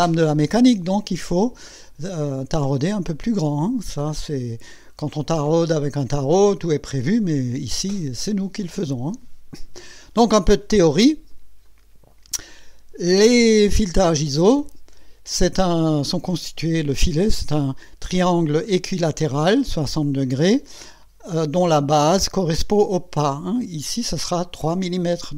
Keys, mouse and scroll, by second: 4.2-5.1 scroll down 4, 11.6 click.